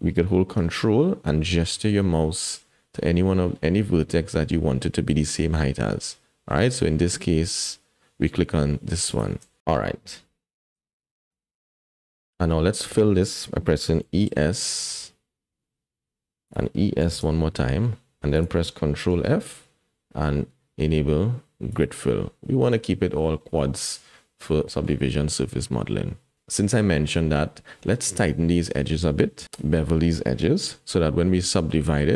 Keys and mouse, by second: 11.1 shift+click, 14.0 e, 17.0 e, 19.1 ctrl+f, 22.7-24.5 middle drag, 24.6 shift+middle click, 26.6 middle click, 27.1 shift+middle click, 27.8 middle click.